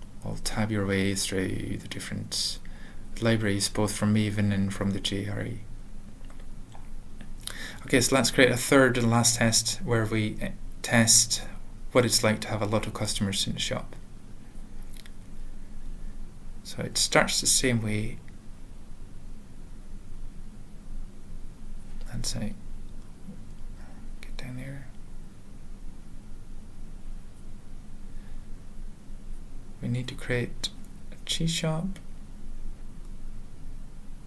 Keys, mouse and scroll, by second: 1.8 ctrl+p, 2.0 ctrl+p, 2.9 click, 4.3 Return, 7.7 Return, 7.7 Tab, 7.7 typing, 9.7-11.1 typing, 13.2-15.6 typing, 21.6 ctrl+e, 21.8 ctrl+a, 22.2 ctrl+s, 22.5 ctrl+e, 24.0 Return, 24.2 ctrl+a, 24.6 ctrl+s, 24.9 ctrl+p, 28.5 Tab, 28.5-30.1 typing, 30.8 alt+BackSpace, 31.7 typing, 33.1-34.2 typing.